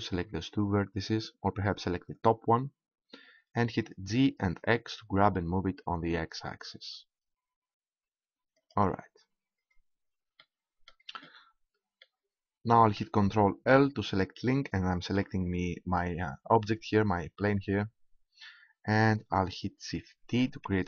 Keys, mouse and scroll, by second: 2.1-3.8 right drag, 3.7 g, 8.6-10.6 drag, 14.9 ctrl+l, 20.2 shift+d.